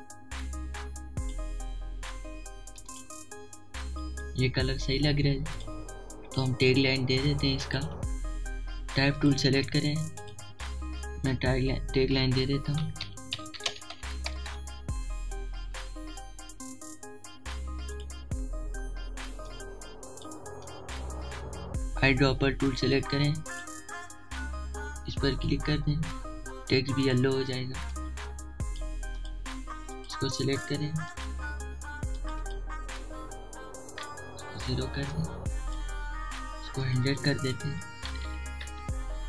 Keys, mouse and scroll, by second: 2.1 alt+shift+click, 3.1-4.5 alt+shift+drag, 4.5 alt+shift+click, 6.1 alt+scroll up 1, 6.5 space, 6.6 click, 7.0 space, 8.7 right click, 9.8 click, 9.8 typing, 13.4-14.2 typing, 18.5 click, 18.5 typing, 20.1 alt+shift+click, 23.4 right click, 24.1 click, 34.2 0, 34.7 Return, 35.8-37.5 drag, 38.3 1.